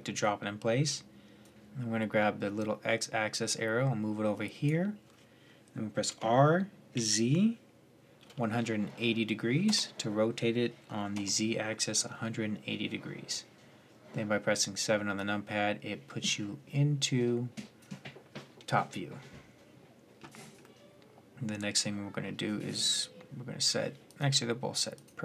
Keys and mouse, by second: 1.3-3.6 drag, 5.9 r, 10.9 KP_7, 15.0-16.8 drag, 20.4 middle drag, 23.8-25.2 drag.